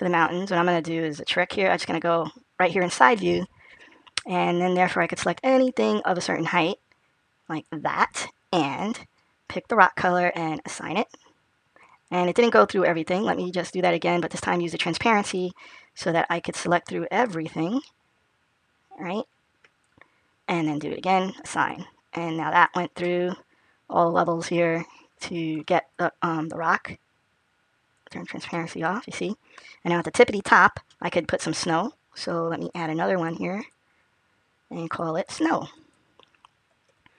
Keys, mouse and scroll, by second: 1.7 click, 5.0 click, 10.5 click, 14.0 click, 15.1 click, 17.4 click, 21.4 click, 22.5 click, 22.9 middle click, 26.5 click, 27.8 click, 28.3 middle click, 32.4 click, 34.4 click, 35.3 click, 36.0 click.